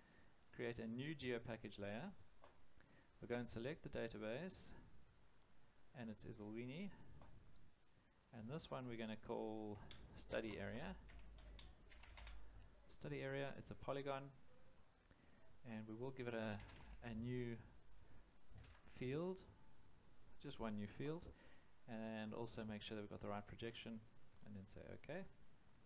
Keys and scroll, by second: 10.0-12.6 typing, 16.2-17.3 typing, 18.5 5, 19.7 0.